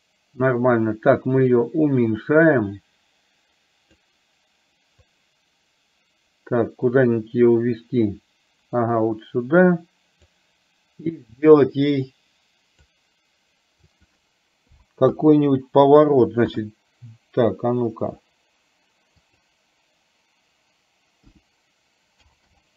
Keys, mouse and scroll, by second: 1.5-4.1 drag, 5.0-10.4 drag, 11.5-13.1 drag, 14.0-15.4 drag, 15.9-22.7 drag.